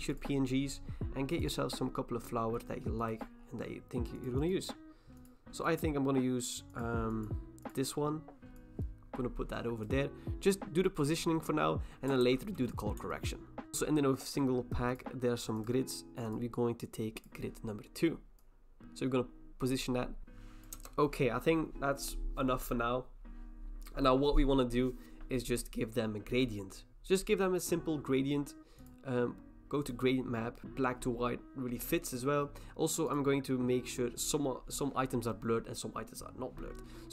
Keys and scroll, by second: 12.2 ctrl+t, 20.2 ctrl+t, 20.7 Return.